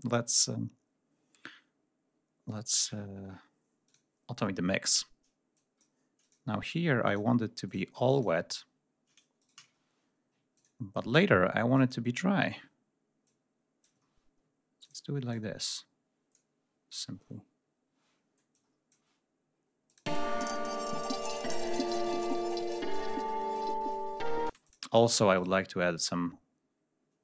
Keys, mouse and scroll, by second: 3.7 click, 4.5 scroll down 1, 5.3 click, 6.0 click, 6.9 click, 7.5 click, 7.7 d, 7.9 click, 9.2 ctrl+shift+right click, 9.6 ctrl+shift+scroll down 2, 10.4 ctrl+middle click, 11.0 middle click, 12.0 ctrl+scroll down 1, 13.0 middle click, 13.8 ctrl+scroll up 1, 14.6 ctrl+middle click, 15.1-16.3 ctrl+drag, 16.8 scroll up 2, 17.2 scroll down 2, 18.3 click, 19.7 click, 19.9 space, 22.2 click, 23.2 ctrl+scroll up 1, 24.3 space.